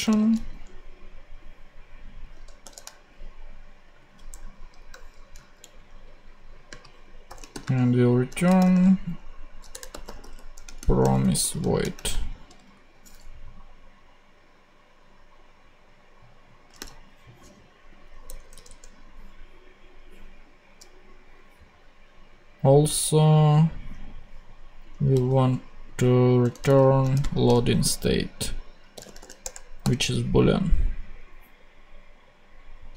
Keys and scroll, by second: 0.0 super+v, 2.6 shift+;, 4.2 BackSpace, 5.3 super+BackSpace, 5.3 super+Right, 6.3 Right, 7.2-11.8 typing, 12.7 shift+super+Right, 16.7 ,, 18.2 BackSpace, 25.1 super+c, 26.4 Return, 26.6 super+v, 27.1 shift+super+;, 27.1 shift+space, 28.9 b, 29.4 Return, 29.8 ,.